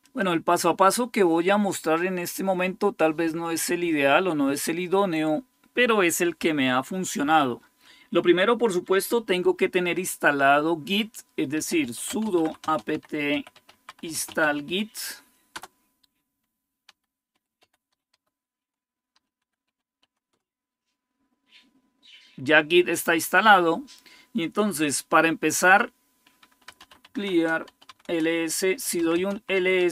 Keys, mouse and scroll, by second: 0.0-7.8 drag, 11.3-15.3 typing, 16.4-20.6 typing, 26.3-29.6 typing.